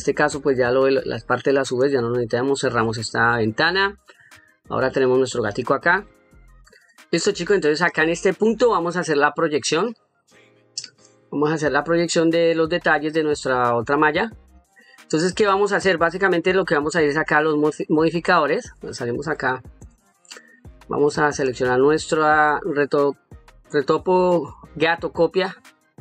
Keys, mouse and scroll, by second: 0.8 click, 2.8 shift+middle click, 3.6 ctrl+middle click, 4.3 middle click, 5.1 middle click, 6.6 click, 7.7 middle click, 8.7 shift+middle click, 10.0 middle click, 15.7 middle click, 19.0 Tab, 21.1 click.